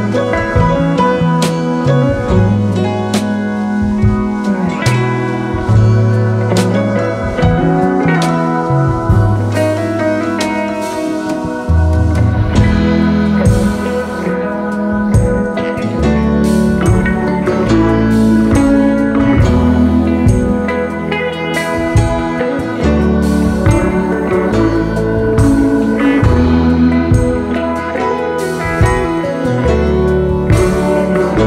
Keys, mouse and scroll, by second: 0.3 alt+shift+scroll down 1, 1.8 right click, 4.0 alt+scroll up 1, 4.9-5.2 alt+scroll up 1, 5.5 right click, 6.8 double click, 8.8 right click, 10.3 right click, 12.1 shift+click, 12.6 alt+click, 13.9 alt+scroll down 1, 14.5-15.0 alt+scroll down 3, 15.2 alt+scroll down 1, 16.1 alt+scroll down 1, 21.0 Left, 21.6 Down, 23.8 alt+scroll down 1, 24.7 space, 24.7 space, 25.5 alt+scroll up 1, 26.2 space, 26.3 space, 29.8 shift+click.